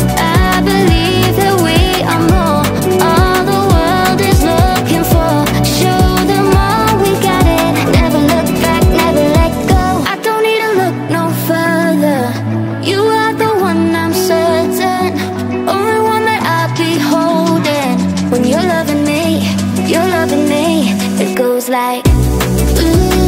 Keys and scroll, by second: 16.5 ctrl+z.